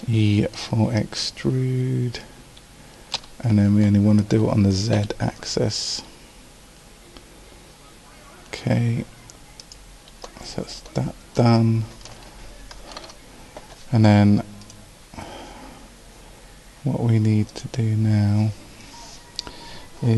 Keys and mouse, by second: 3.1 e, 12.9 KP_Enter.